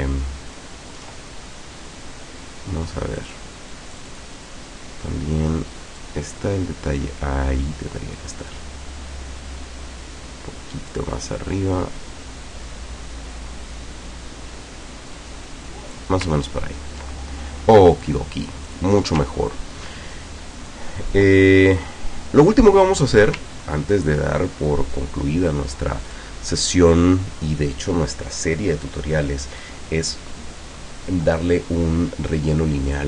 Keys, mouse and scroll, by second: 1.0-2.1 ctrl+middle drag, 3.2 click, 3.9 click, 6.0-8.8 drag, 10.9-16.2 drag, 16.5-16.9 ctrl+scroll down 2, 18.0 click, 18.7 click, 19.4 ctrl+scroll down 2, 20.2 ctrl+click, 21.9 middle click, 23.7 ctrl+scroll down 2, 26.1 click, 32.9 click.